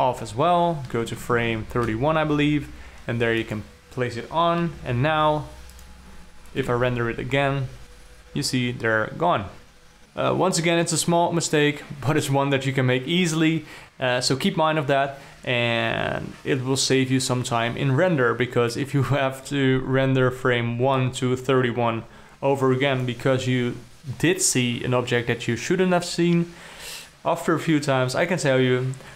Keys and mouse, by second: 0.3 i, 1.6 shift+Up, 1.8 shift+Up, 2.0 shift+Up, 3.9 click, 6.2 click, 7.2 F12, 21.4-27.1 drag.